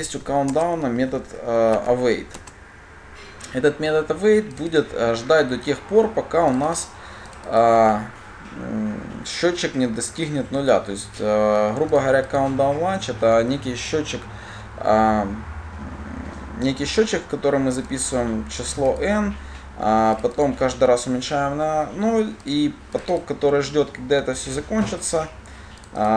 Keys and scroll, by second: 0.7 Return, 1.2 Return.